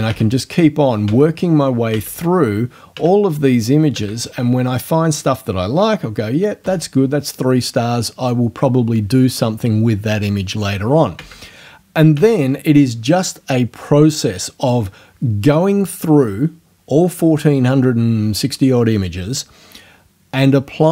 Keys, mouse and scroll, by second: 0.1 Right, 1.1 Right, 1.9 Right, 3.0 Right, 4.0 Right, 6.6 3, 11.2 Right, 12.2 Right.